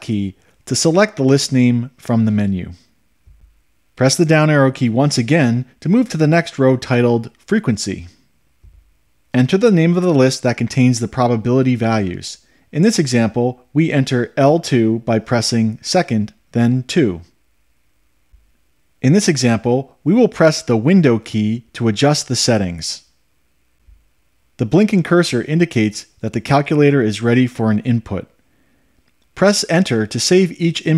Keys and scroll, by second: 4.6 Down, 17.3 2.